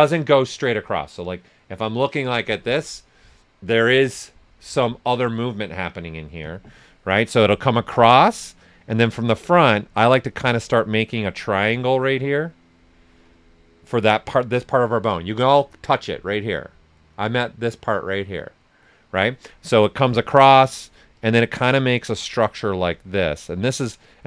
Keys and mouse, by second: 7.5 click, 8.5 right click, 9.8 click, 19.9 click, 19.9 typing.